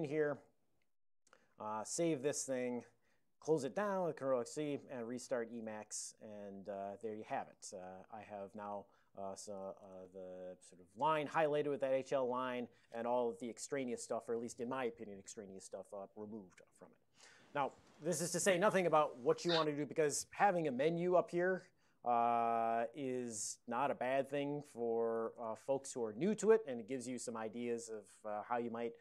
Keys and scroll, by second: 0.0 ctrl+y, 0.4 ctrl+space, 0.8-1.5 typing, 2.9 ctrl+x, 3.0 ctrl+c, 4.8-6.1 typing, 7.6 ctrl+p, 8.3 ctrl+n, 8.7 ctrl+p, 9.1 ctrl+n, 9.2-10.2 typing, 10.3 ctrl+a, 10.6 ctrl+p, 10.9 ctrl+n, 12.2 ctrl+p, 20.9-22.0 typing, 23.3 Tab, 23.3-25.8 typing.